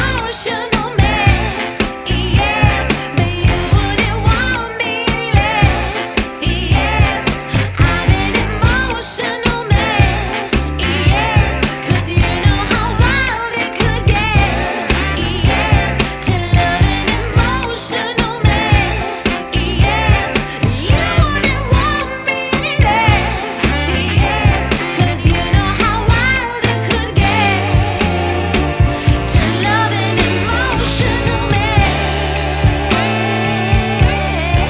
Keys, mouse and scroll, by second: 10.2 shift+a, 20.6 click, 24.4-25.0 scroll up 2, 25.0-25.9 scroll down 1, 25.9 click, 27.5-28.0 scroll up 2, 28.6 click, 29.9 click, 32.4 shift+a.